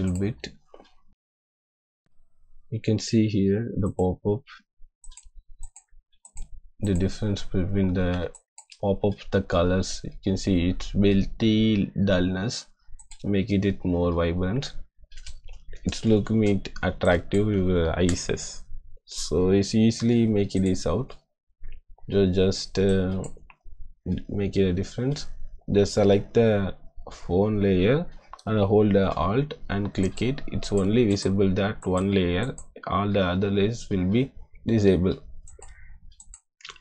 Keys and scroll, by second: 8.2 space, 17.8 ctrl+KP_0.